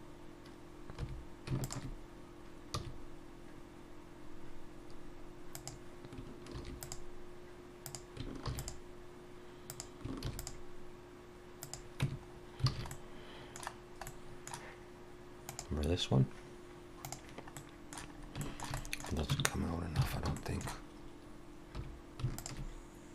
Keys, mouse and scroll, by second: 0.6 scroll up 1, 1.0 3, 1.6 alt+shift+click, 2.7 s, 6.5 ctrl+r, 8.6 ctrl+r, 10.4 ctrl+r, 12.0 Tab, 12.3-12.7 scroll down 2, 12.7 alt+a, 12.9 middle click, 13.7 scroll down 1, 14.1 middle click, 17.6 middle click, 18.2-18.7 scroll up 2, 18.4 shift+middle click, 18.8 middle click, 19.3 Tab, 19.7 scroll up 2, 20.0 alt+a, 20.4 shift+middle click, 21.8 3, 22.4 alt+shift+click.